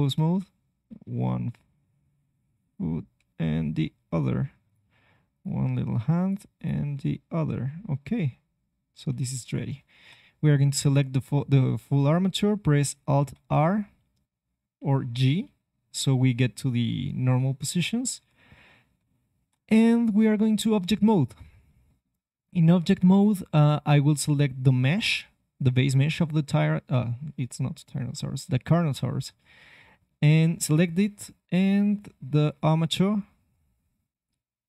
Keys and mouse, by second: 0.2 g, 2.6 click, 3.1 g, 5.3-8.5 drag, 5.5 g, 6.9 g, 9.5-12.8 middle drag, 9.9 a, 13.3 alt+r, 15.1 alt+g, 18.1 Tab, 18.9 ctrl+Tab, 20.0-22.0 right drag, 24.2 middle click, 30.5-32.5 middle drag.